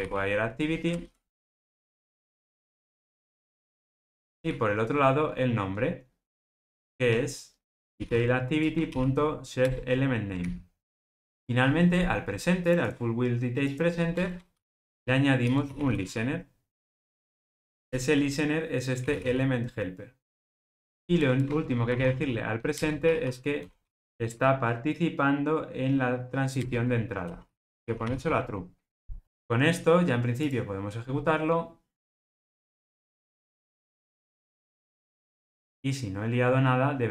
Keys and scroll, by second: 3.3 Return, 8.6 Return, 10.3 alt+super+l, 15.5 Return, 22.8 Return, 30.4 ctrl+r.